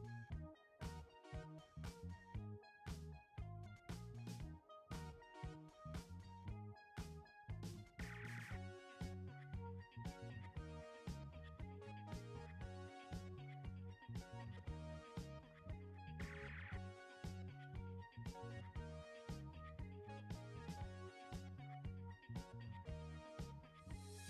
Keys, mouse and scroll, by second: 1.6 click, 4.1-13.5 drag, 13.5-24.2 drag.